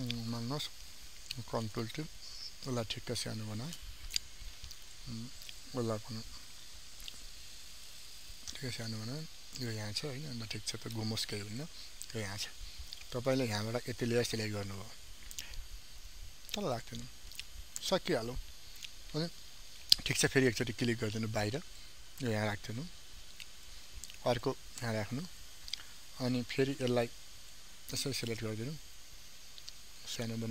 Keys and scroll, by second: 1.3 ctrl+t, 6.6 ctrl+t.